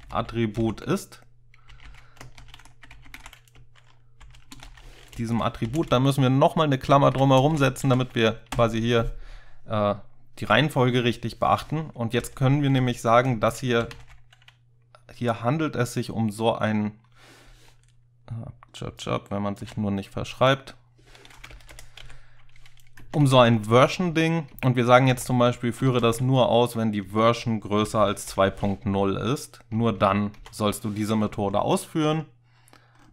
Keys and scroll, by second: 0.0-5.7 typing, 5.9 Left, 6.4 Left, 6.8 Left, 7.5 (, 7.9 End, 8.6-9.8 typing, 12.2-14.5 typing, 19.7 typing, 21.6 ctrl+BackSpace, 22.1-22.7 typing, 23.0 Down, 23.3 Down, 23.5 Down, 25.2 Tab, 25.8-26.1 typing, 27.3-28.4 typing, 29.8 Down, 30.0 Down, 30.4 Down.